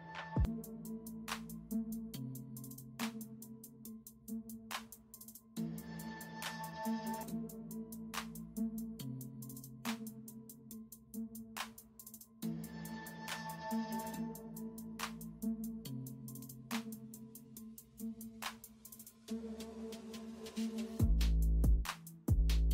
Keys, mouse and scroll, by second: 0.2 ctrl+alt+z, 2.7 ], 5.7 space, 7.4-8.7 typing, 10.4 typing, 11.8 space, 12.0 space, 13.9-14.9 typing, 16.9 space, 18.7 ctrl+j, 21.7-22.1 typing.